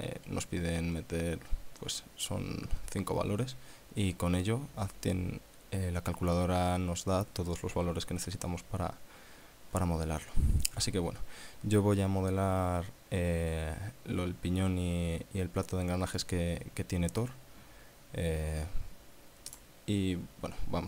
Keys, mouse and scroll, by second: 0.4 scroll down 2, 8.5 scroll down 2, 19.5 click.